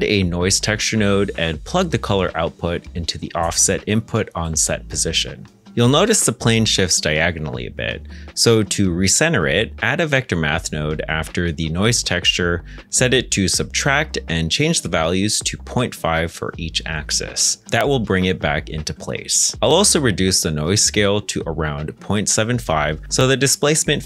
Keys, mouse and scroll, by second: 1.3-2.2 typing, 2.5 Return, 4.2 shift+middle click, 6.8 middle click, 8.2 g, 8.6 shift+a, 9.7-11.1 typing, 16.1 typing, 16.7 Return, 19.8 middle click, 22.2 7, 22.3 5, 22.5 Return.